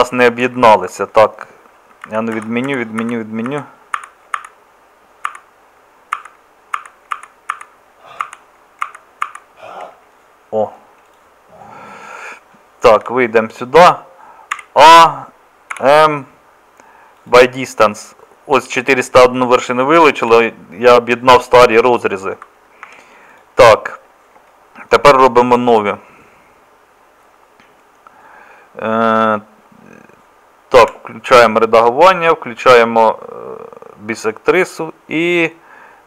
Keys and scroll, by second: 2.1 ctrl+z, 2.4 ctrl+z, 2.7 ctrl+z, 3.0 ctrl+z, 3.5 ctrl+z, 4.0 ctrl+z, 4.4 ctrl+z, 5.3 ctrl+z, 6.2 ctrl+z, 6.8 ctrl+z, 7.2 ctrl+z, 7.5 ctrl+z, 8.2 ctrl+z, 8.9 ctrl+z, 9.3 ctrl+z, 13.0 KP_Divide, 14.6 a, 15.7 m, 20.3 KP_Divide, 22.9 Tab, 30.8 Tab.